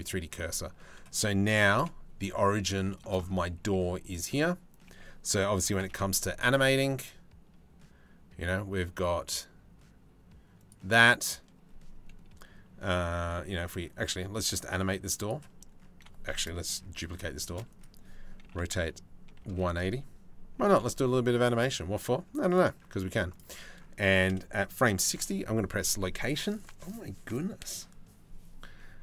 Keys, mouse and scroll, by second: 1.3 g, 2.5 middle click, 3.2 g, 5.3 g, 13.3-14.9 drag, 17.0 shift+d, 18.0 r, 20.2 g, 22.9 shift+middle click, 24.7 i, 28.9 middle click.